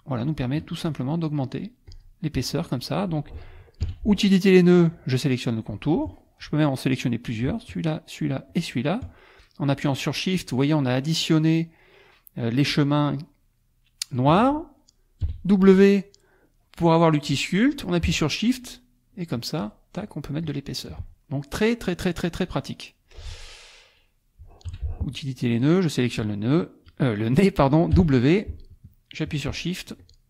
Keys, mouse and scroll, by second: 0.2 shift+click, 1.4 shift+click, 1.9 shift+click, 3.8 n, 4.8 click, 7.9 shift+click, 8.5 shift+click, 15.2 w, 18.6 shift+click, 19.1 shift+click, 20.0 shift+click, 20.4 shift+click, 21.2 shift+click, 21.8-22.9 drag, 23.0 click, 24.7 n, 25.6 click, 27.9 w, 30.0 shift+click.